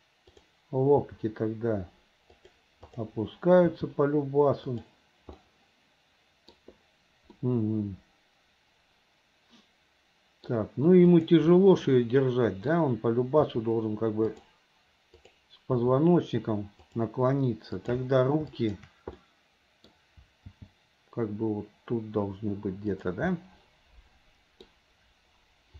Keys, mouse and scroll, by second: 0.3 click, 2.9 click, 4.7 g, 5.4-6.6 middle drag, 5.4 scroll up 1, 7.4-10.6 middle drag, 7.4-8.1 scroll up 1, 10.5 scroll down 1, 11.1 click, 12.0 middle click, 14.6 r, 15.2 click, 16.8 r, 17.8 click, 18.5 shift+click, 19.2 middle click, 21.1 g, 23.4-24.6 middle drag, 23.4 scroll up 2.